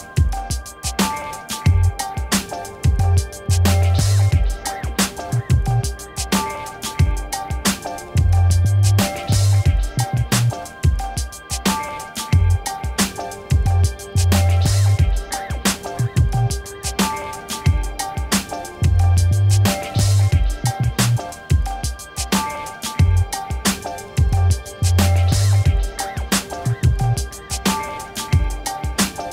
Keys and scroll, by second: 6.9 ctrl+t, 8.7 Return, 11.4 z, 13.0 Left, 14.2 Right, 15.2 ctrl+-, 22.3-25.2 typing, 25.5 Return.